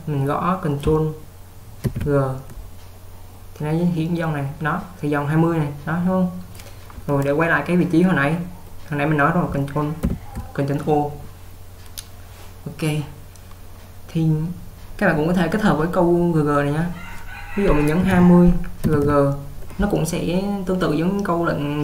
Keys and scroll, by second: 2.0 ctrl+g, 10.3 ctrl+o, 17.9-19.1 typing.